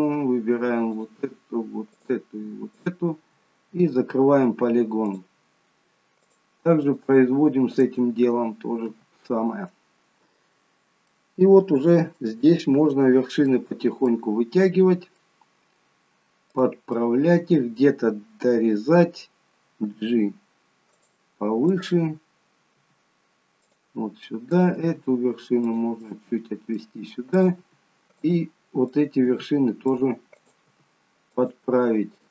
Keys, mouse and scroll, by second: 0.9 shift+click, 0.9-1.2 scroll up 1, 3.9 f, 5.0 click, 6.2 shift+click, 8.9 f, 11.2 middle click, 12.9 middle click, 12.9-13.8 scroll down 1, 13.8 scroll down 1, 14.0 middle click, 16.6 click, 17.0 middle click, 19.9 g, 21.7 click, 22.7 g, 24.5 click, 24.8 g, 26.1 middle click, 27.4 click, 27.6 g, 28.9 click, 29.3 g, 30.3 click, 30.7 g.